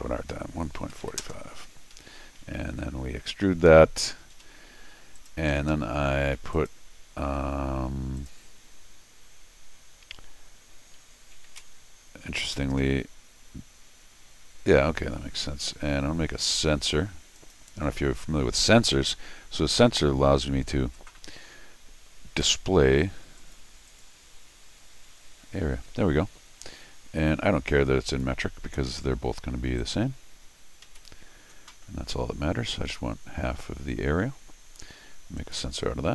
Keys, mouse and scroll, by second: 0.0-1.5 typing, 1.9 Escape, 2.7 x, 5.1 click, 5.5 Escape, 5.7 Escape, 6.5 click, 8.2 click, 11.4 alt+m, 17.3 click, 23.4 click, 23.9 click, 28.0 click, 29.8 click, 30.8 alt+m, 35.4 click.